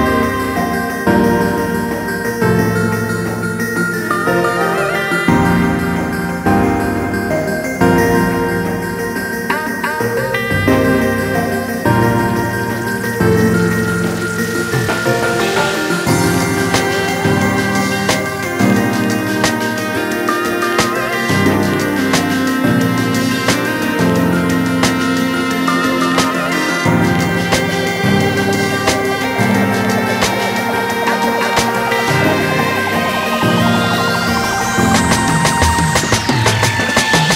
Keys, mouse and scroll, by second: 0.7 click, 2.0 scroll down 1, 2.1 alt+a, 2.3-2.7 scroll up 1, 4.0 click, 4.9 ctrl+s, 5.3 click, 6.5-6.9 scroll down 2, 7.5 ctrl+e, 8.1 scroll up 1, 9.7 click, 12.9 a, 13.6 shift+click, 15.6 scroll up 1, 16.3 scroll down 1, 17.0 scroll down 1, 18.0 click, 21.7-22.3 scroll up 2, 22.5 alt+a, 22.7 scroll down 1, 23.1 click, 23.3 x, 23.5 scroll down 1, 23.7-24.4 scroll up 2, 24.9 scroll up 1, 26.0 ctrl+s, 28.5 scroll down 1, 29.5 scroll down 1, 30.6-30.9 scroll up 1, 30.9 click, 31.2 KP_Decimal, 32.1 5, 32.3 scroll down 1, 32.8 click.